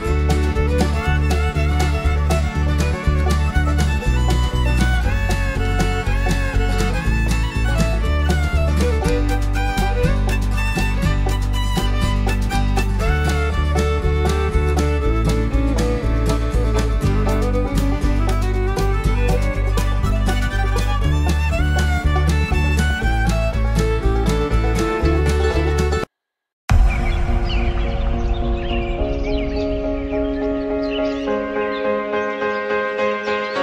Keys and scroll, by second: 17.4 alt+Num_Lock.